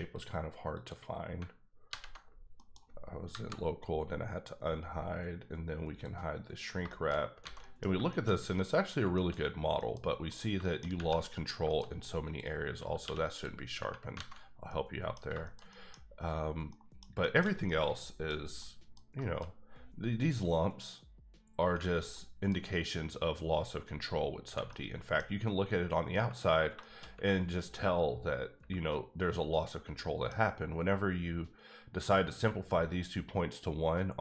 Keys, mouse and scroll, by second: 0.1 click, 0.7 click, 1.9 alt+h, 2.5 middle click, 3.3 KP_Divide, 4.1-4.7 scroll down 3, 5.9 click, 6.6 scroll down 2, 6.9 shift+middle click, 7.4 alt+a, 7.6 middle click, 7.9 shift+scroll down 1, 8.1 shift+middle click, 9.4 scroll up 3, 9.8 middle click, 10.3 click, 10.6 shift+middle click, 11.2 middle click, 12.2 click, 13.0 q, 13.3 click, 14.1 alt+a, 14.2 alt+scroll down 4, 14.6 scroll up 1, 14.7 middle click, 15.1 scroll down 2, 15.4 shift+middle click, 15.9-16.6 scroll up 3, 16.7 middle click, 17.1 scroll down 1, 17.2 shift+middle click, 18.6 middle click, 22.1 middle click, 22.7 scroll up 2, 24.4 scroll down 2, 24.7 middle click, 26.8 shift+middle click, 27.3 scroll up 2, 28.2 scroll down 2, 28.6 Tab, 29.9 middle click, 30.5-32.6 scroll up 3.